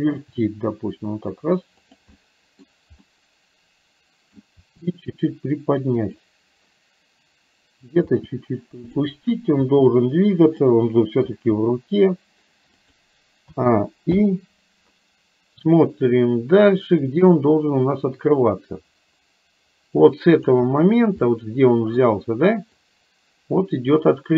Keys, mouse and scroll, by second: 0.5 r, 2.2 middle click, 3.1-4.5 middle drag, 4.6 r, 8.1 g, 9.7 r, 11.3 g, 13.6 a, 14.2 i, 17.5-20.7 drag, 21.2 middle click, 23.0-24.3 drag.